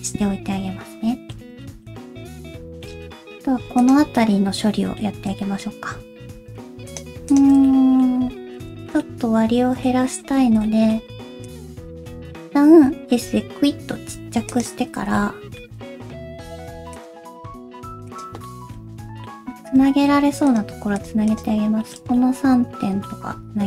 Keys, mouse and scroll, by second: 1.6 shift+middle click, 2.0-2.4 scroll up 2, 2.6 shift+middle click, 2.9-3.3 scroll up 2, 3.3 Tab, 3.8 click.